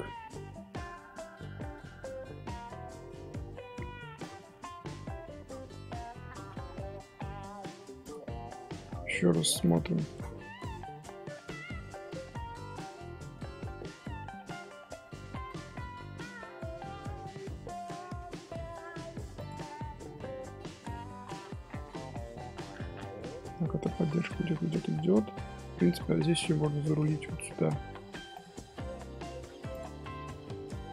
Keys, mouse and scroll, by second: 0.9 j, 1.3-1.8 scroll up 1, 1.8 middle click, 2.3 Tab, 2.5-4.8 middle drag, 4.8 Tab, 4.9-7.8 middle drag, 7.8 2, 8.0 click, 9.6 click, 9.9-13.9 middle drag, 14.5 scroll up 1, 14.7 scroll down 2, 15.1 1, 16.1-19.0 middle drag, 19.0 2, 19.3 click, 19.9-22.0 middle drag, 22.0 scroll down 2, 22.0 scroll up 1, 22.1 scroll down 1, 22.4 scroll up 1, 22.5 middle click, 23.1 scroll up 1, 23.2 scroll down 3, 23.3-24.1 scroll up 1, 24.1-25.3 middle drag, 25.3 scroll up 3, 25.6 scroll down 1, 25.6-26.1 scroll up 1, 26.1-26.9 scroll down 4, 26.2 middle click, 26.9-27.9 shift+middle drag, 27.9 ctrl+r, 30.0 shift+middle click, 30.3 scroll up 2, 30.4 scroll down 1, 30.4 scroll up 1, 30.7 1.